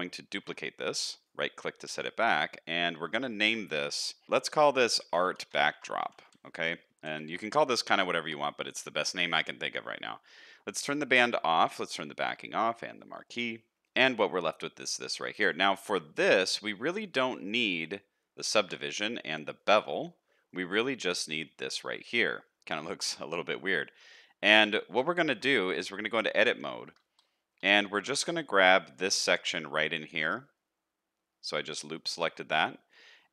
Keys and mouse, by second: 0.4 shift+d, 3.3 click, 5.7-13.7 shift+drag, 14.3 middle click, 20.5 middle click, 21.3 middle click, 22.5 middle click, 23.5 middle click, 24.2 middle drag, 24.6 Tab, 25.1 shift+middle click, 25.6 middle click, 26.6 1, 28.4 middle click, 29.0 shift+middle click, 31.5 middle click, 32.0 shift+middle click.